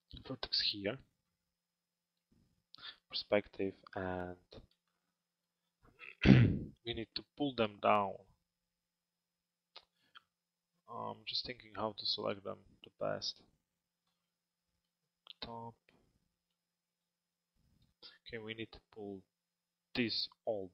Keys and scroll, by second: 2.4 p, 13.8 f.